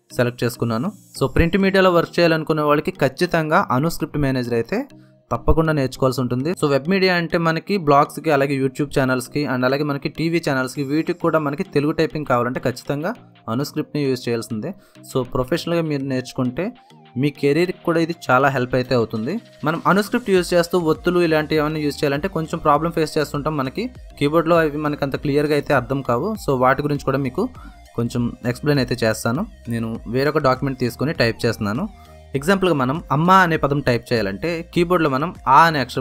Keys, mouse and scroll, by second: 1.6-3.7 typing, 5.8 ctrl+Num_Lock, 5.8 typing, 8.8-11.8 drag, 21.6 right click, 21.9 click, 23.0 alt+l, 24.6 click, 25.2 ctrl+shift+n, 26.5 click, 28.6 click, 31.1 click, 34.2 q.